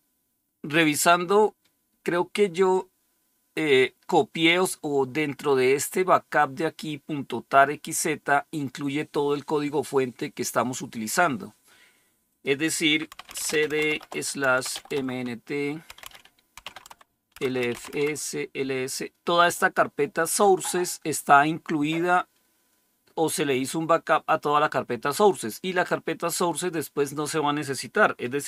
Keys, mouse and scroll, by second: 2.6-4.4 drag, 12.1 click, 12.8-18.5 typing.